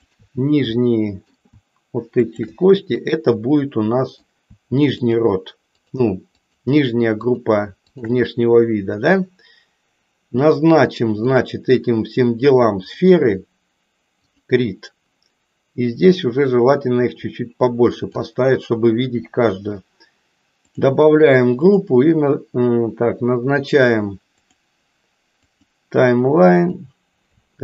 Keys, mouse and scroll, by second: 0.8 middle click, 2.2 shift+click, 3.1-4.2 middle drag, 4.9 shift+click, 6.3 shift+click, 11.3-13.1 drag, 14.2 click, 16.4-18.1 drag, 20.7 click, 24.4-25.8 drag, 26.7 click.